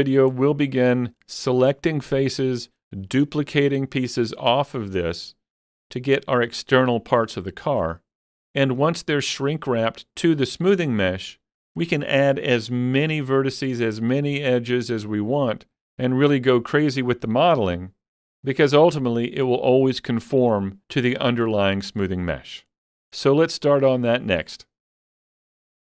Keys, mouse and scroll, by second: 0.0-25.0 shift+middle drag, 0.7 shift+middle click.